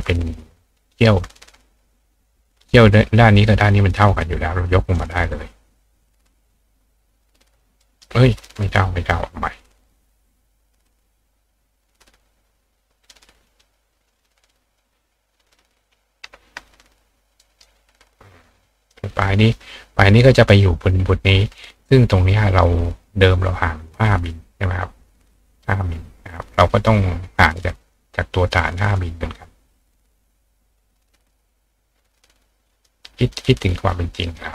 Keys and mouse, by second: 4.2 click, 6.0-8.0 drag, 7.8 right click, 11.0-13.1 drag, 13.5 click, 14.1-14.8 drag, 16.2-17.6 drag, 17.4 ctrl+right click, 18.4-18.9 drag, 23.0 click, 24.1 click, 26.8 click, 27.9-31.3 ctrl+drag, 32.1 click, 33.4 click, 34.2 click.